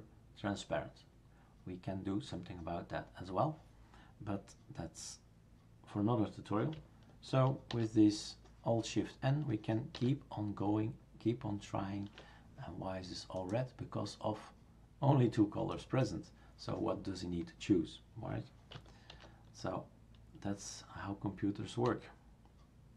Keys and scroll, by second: 7.7 alt+shift+n, 9.9 alt+shift+n, 19.1 alt+shift+n, 21.8 alt+shift+n.